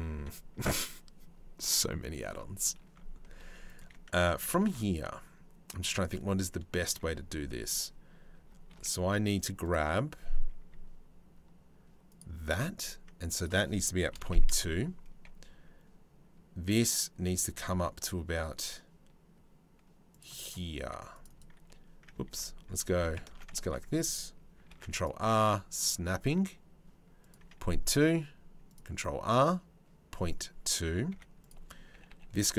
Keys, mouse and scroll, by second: 2.9 3, 3.3 middle click, 4.2 ctrl+r, 8.3 ctrl+r, 13.0-14.1 drag, 17.1 ctrl+r, 20.5 ctrl+r, 21.9 ctrl+z, 22.9 ctrl+z, 23.2 ctrl+r, 27.5 ctrl+r, 30.7 1, 31.0 click, 31.5 g.